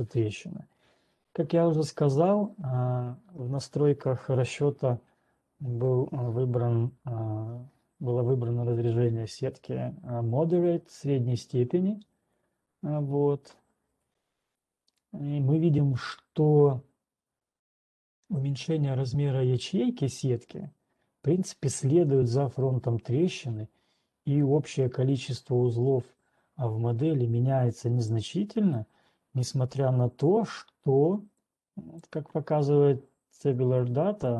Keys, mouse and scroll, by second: 2.5 typing, 29.1 scroll up 1, 30.6 scroll up 1, 32.6 click.